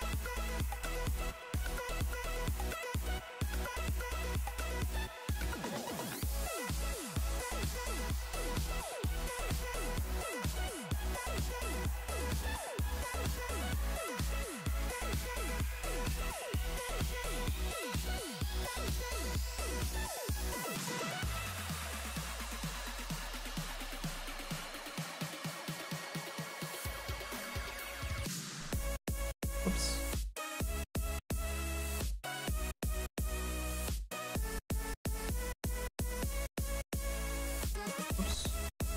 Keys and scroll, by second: 23.0 s, 23.5 s, 25.4 s, 25.7 s, 28.3 ctrl+z, 36.7 ctrl+z.